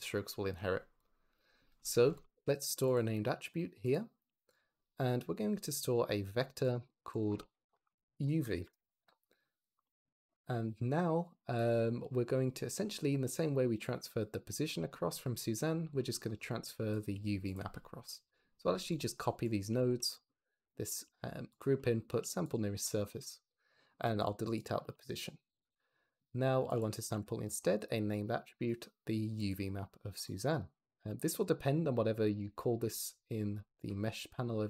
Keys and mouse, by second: 0.9 click, 2.0 shift+a, 3.8 click, 4.0 g, 5.9-6.7 drag, 7.2-8.5 shift+drag, 11.6 click, 16.5 click, 17.0 g, 19.7 shift+d, 20.0 click, 20.8 g, 21.5 click, 22.0 g, 22.3 click, 24.7 x, 26.5 shift+a, 28.5 click, 32.2 drag.